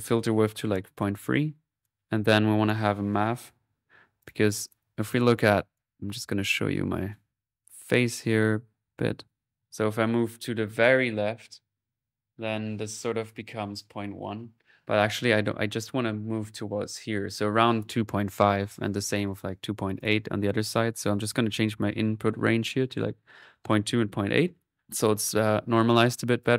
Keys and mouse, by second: 1.6 click, 2.6 right click, 2.9-3.7 typing, 4.2-5.7 drag, 4.8 middle click, 5.5 middle click, 5.7 right click, 6.1 click, 11.7-12.9 middle drag, 12.9 alt+1, 17.2 middle click, 17.6 click, 20.0 click, 20.5-22.2 drag, 24.8 click, 25.7-26.5 drag.